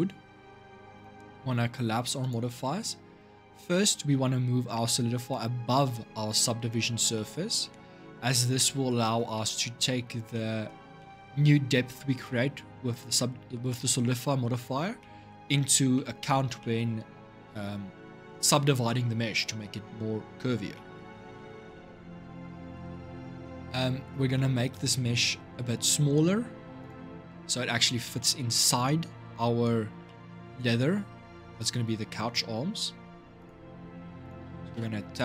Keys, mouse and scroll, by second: 0.7 click, 1.1-2.0 scroll up 1, 2.0-6.1 drag, 6.9-7.7 middle drag, 7.7-8.3 scroll up 1, 8.3-9.8 middle drag, 9.8 scroll up 2, 10.1-11.0 middle drag, 11.0-14.0 scroll down 1, 14.8-20.8 middle drag, 20.8 scroll down 2, 21.1-26.6 shift+middle drag, 26.6 click, 27.2-32.8 shift+middle drag, 33.1 click, 33.6 scroll up 2, 34.0 click, 34.5 Tab, 35.0 scroll down 2.